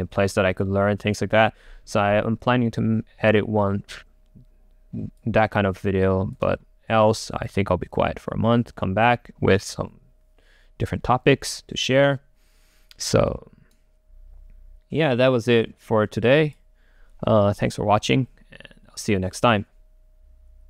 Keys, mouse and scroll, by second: 5.5-7.1 drag, 7.1-9.4 right drag.